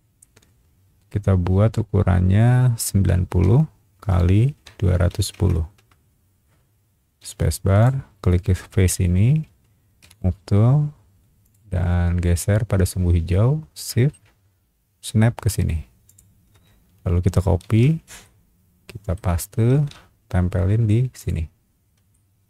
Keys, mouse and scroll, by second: 3.3 KP_9, 3.4 KP_0, 4.5 ;, 4.9 KP_2, 5.1 KP_1, 5.3 KP_0, 5.7 KP_Enter, 6.8 middle click, 7.2 space, 7.8 click, 8.5 middle click, 9.0 middle click, 10.0 m, 11.4 click, 16.0 shift+click, 17.6 ctrl+c, 18.2 middle click, 19.7 ctrl+v, 21.2 click, 21.7 scroll up 1, 22.1 shift+middle click.